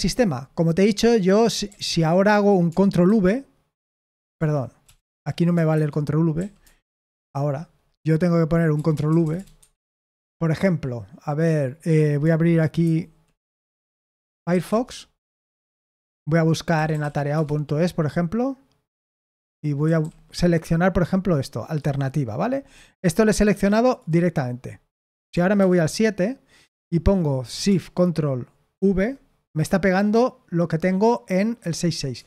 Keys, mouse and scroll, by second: 0.0-0.6 typing, 1.6 o, 3.0 ctrl+v, 4.3 BackSpace, 4.8 BackSpace, 5.0 BackSpace, 5.1 BackSpace, 5.7 Escape, 6.3 i, 7.2 ctrl+v, 8.7 BackSpace, 8.9 BackSpace, 9.0 BackSpace, 9.2 BackSpace, 9.5 Escape, 12.8 super+8, 13.8 alt+space, 13.8-15.0 typing, 16.4-17.4 typing, 19.8 typing, 25.5 super+7, 28.7 ctrl+v, 31.5 Escape, 32.1-32.2 typing.